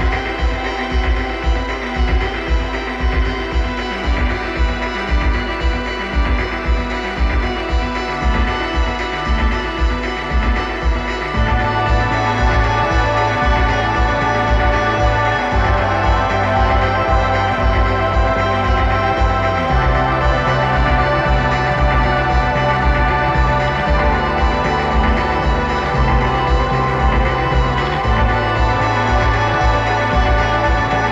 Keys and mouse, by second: 4.0 g, 8.5 click, 8.9 click, 9.3 g, 10.1 click, 10.8 click, 11.7 click, 12.8 g, 15.5 click, 16.6 click, 17.6-18.6 drag, 23.4-25.4 drag, 27.6-30.5 drag, 31.0-31.1 drag.